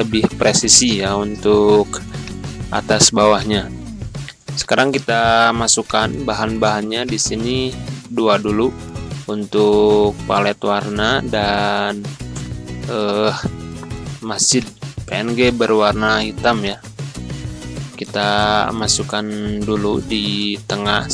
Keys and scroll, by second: 18.1 b, 20.1 c.